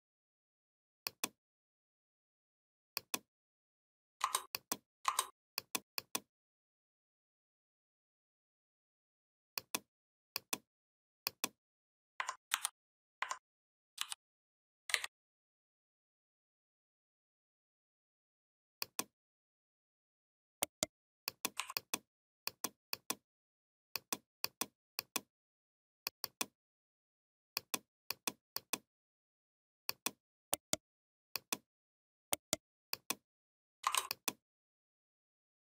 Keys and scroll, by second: 12.3 ctrl+c, 13.8 ctrl+f.